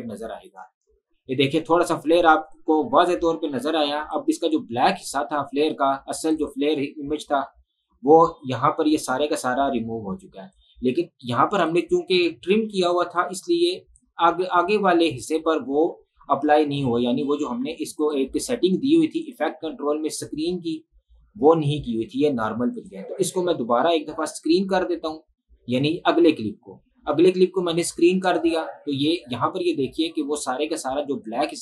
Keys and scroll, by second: 0.5 space.